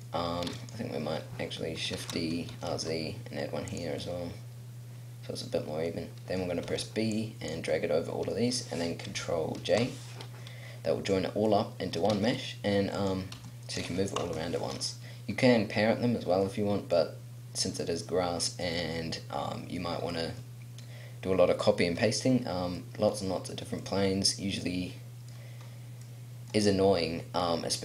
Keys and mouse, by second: 0.5-1.9 right drag, 1.9 shift+d, 6.7 b, 9.6 ctrl+j, 10.4 click, 12.1 a, 13.3 g, 14.2 ctrl+z, 14.5-15.8 middle drag, 18.1 middle click, 18.9 middle click, 19.0 middle click, 19.6 middle click, 22.3 middle click, 24.1 middle click, 24.2 middle click, 24.5 middle click, 25.0 middle click.